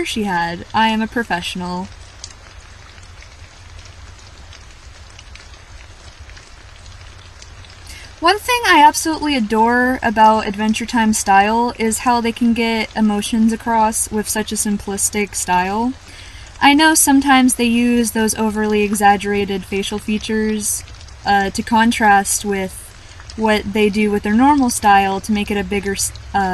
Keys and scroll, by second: 3.4-3.9 scroll down 1, 4.7-5.1 scroll down 1, 11.6-12.0 scroll up 1, 15.3 scroll up 1, 16.1 scroll down 1, 17.2-17.6 scroll down 1.